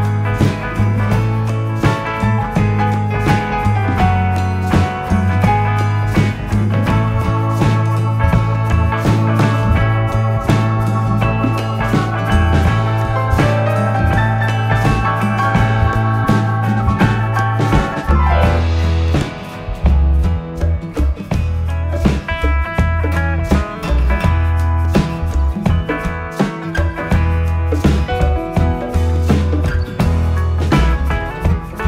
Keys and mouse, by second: 11.5 KP_7, 20.0 z, 20.5 click, 23.4 click, 25.6 alt+click, 28.1 s, 28.9 x, 31.1 click.